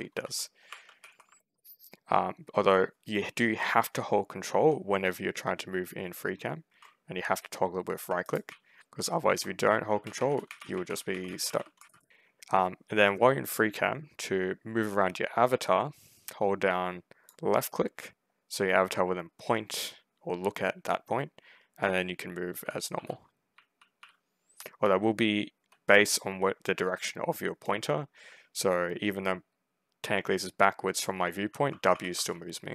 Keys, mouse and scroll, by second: 0.0 ctrl+shift+w, 0.6 ctrl+w, 0.9 ctrl+a, 1.1 ctrl+s, 1.2 ctrl+d, 1.4 ctrl+w, 1.5 a, 3.6 ctrl+s, 4.4 ctrl+w, 8.3 ctrl+s, 8.6 ctrl+a, 8.7 Escape, 9.5-12.5 typing, 17.2-32.7 drag, 21.7-25.2 typing, 31.3-32.7 typing.